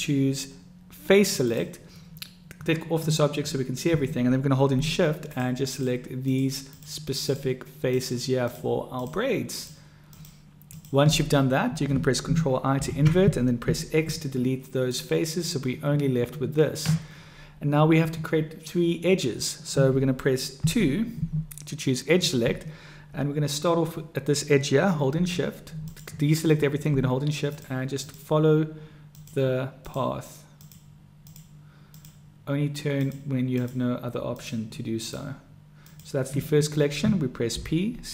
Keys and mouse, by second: 5.7 shift+click, 7.9 shift+click, 10.1 shift+click, 10.7 shift+click, 12.6 ctrl+i, 13.7 x, 20.6 2, 27.4 shift+click, 28.0 shift+click, 30.5 shift+click, 31.3 shift+click, 33.0 shift+click, 35.1-36.4 shift+drag, 37.6 p.